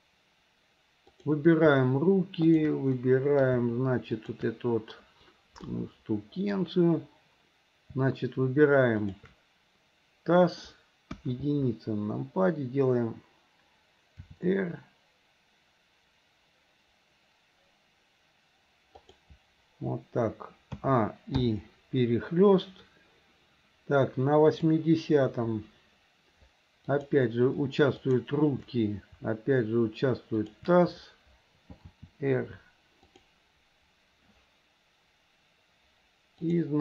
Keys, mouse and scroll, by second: 1.1 click, 2.5 shift+click, 3.0-3.5 middle drag, 4.2 shift+click, 5.8-6.6 middle drag, 9.0 shift+click, 11.2 KP_1, 15.2 r, 20.8 a, 21.5 i, 24.6 click, 26.9 click, 28.0 shift+click, 30.4 shift+click, 31.9 r, 36.5 click.